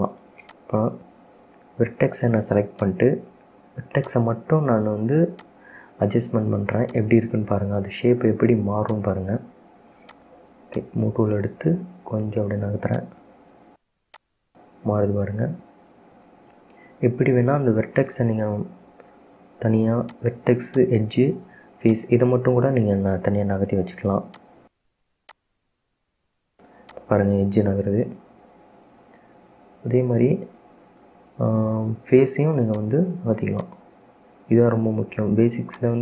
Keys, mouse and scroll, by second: 0.6 click, 1.8 Tab, 3.0 click, 4.3 click, 5.5 shift+click, 7.0 click, 8.2-9.0 scroll up 1, 9.0 shift+click, 10.2 shift+click, 10.9 shift+click, 13.0-14.5 drag, 20.3 click, 20.9 shift+click, 22.0 click, 24.5 click, 25.4 click, 27.0 click, 31.5 ctrl+z, 32.8 click, 33.7 click, 35.8 click.